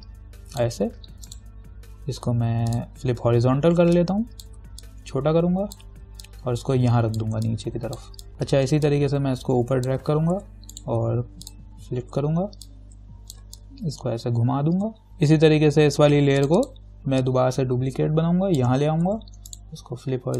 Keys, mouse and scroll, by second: 1.5 right click, 2.9 click, 5.0-8.3 alt+drag, 9.1-10.5 alt+drag, 10.5 ctrl+t, 10.9 right click, 11.7 click, 12.8-15.1 alt+drag, 15.3-16.6 scroll down 1, 16.6 click, 17.4-19.3 alt+drag, 19.3 ctrl+t, 19.7 right click.